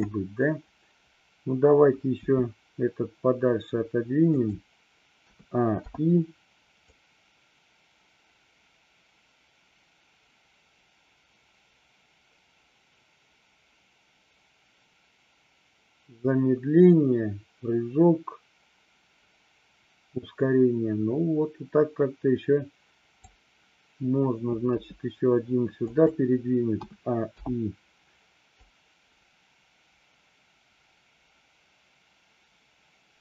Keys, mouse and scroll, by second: 2.3 g, 4.4 click, 5.3 a, 5.9 i, 6.9-23.4 drag, 24.8 g, 25.9 click, 26.8 a, 27.4 i, 28.7-33.2 drag.